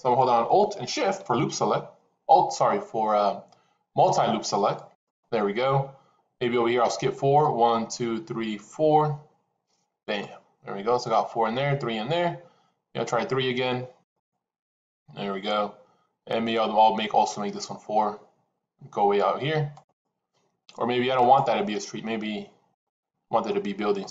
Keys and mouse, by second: 4.6 alt+shift+click, 13.9 alt+shift+click.